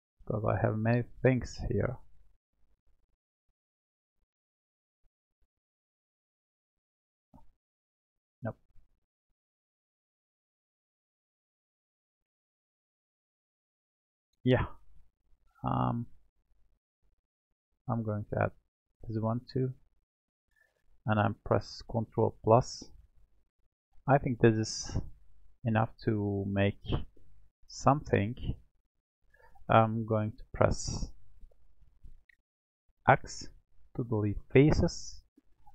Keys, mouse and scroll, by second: 0.2-1.3 scroll up 3, 1.3-8.7 drag, 9.6-10.9 drag, 10.9 middle click, 11.9-13.3 scroll down 1, 13.3 click, 16.1 click, 19.8-22.3 shift+drag, 22.3 ctrl+KP_Add, 23.1 ctrl+KP_Add, 25.2-26.4 middle drag, 26.4-26.9 scroll down 1, 26.9-28.3 middle drag, 28.3-29.9 scroll up 4, 29.9-31.4 scroll down 2, 33.0 x, 35.2-35.7 scroll up 1.